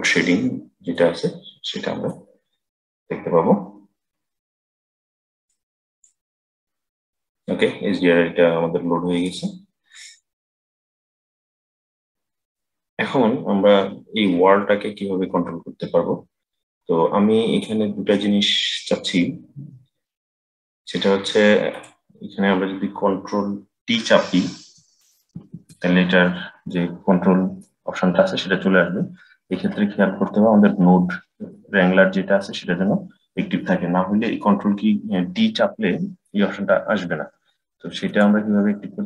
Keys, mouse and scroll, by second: 0.8-5.8 middle drag, 5.8 click, 9.1-11.4 drag, 11.4-12.0 scroll down 2, 12.0-14.6 scroll up 3, 17.7-18.2 scroll down 3, 18.2-20.0 scroll up 4, 20.0-21.6 middle drag, 21.6 click, 25.3 ctrl+t, 26.1-26.6 scroll down 3, 26.6-37.9 middle drag, 37.9-39.0 drag.